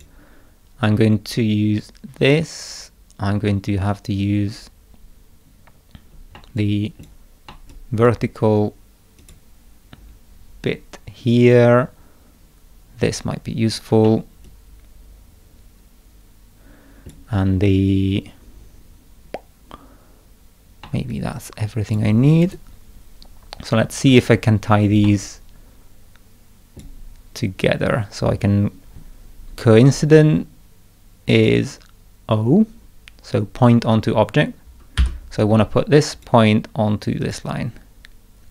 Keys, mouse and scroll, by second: 6.4 middle click, 6.6 click, 7.5 middle click, 7.7 click, 8.0 scroll down 2, 8.1 middle click, 9.2 click, 13.1 click, 14.1-17.1 middle drag, 14.5-17.1 drag, 20.9-22.0 middle drag, 21.1 click, 22.5 right click, 25.1-26.8 middle drag, 25.3-26.8 drag, 35.0 o, 36.2 click, 37.2 click.